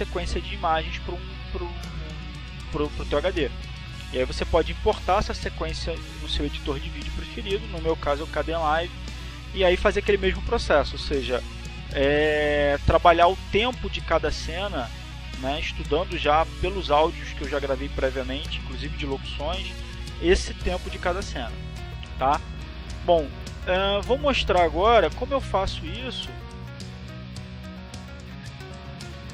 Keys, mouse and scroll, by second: 29.0 click.